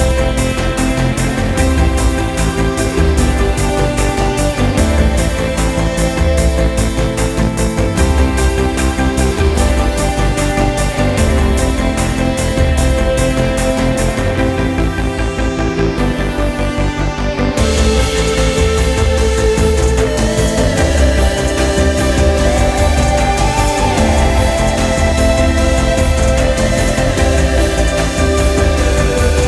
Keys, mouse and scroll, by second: 0.2 shift+click, 2.0 shift+click, 3.2 x, 8.1 click, 9.4 g, 15.7 g, 23.2 Tab, 25.6 click.